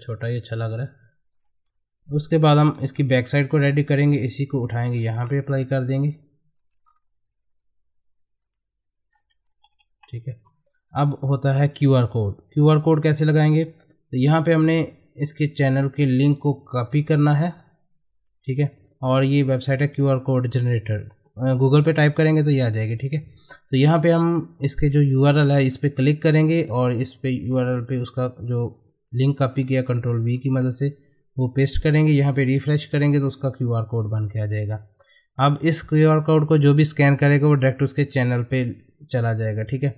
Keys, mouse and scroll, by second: 0.8 shift+click, 1.7 Up, 2.0 click, 2.1 F4, 2.8 middle click, 3.6 click, 4.8 right click, 5.2-5.6 scroll up 1, 6.2 shift+click, 6.8 scroll up 1, 7.7-9.7 drag, 9.7 Up, 10.8 click, 13.8 click, 16.1 click, 25.6 click, 27.8 v, 28.5-30.2 drag, 30.2 ctrl+v, 32.2 click.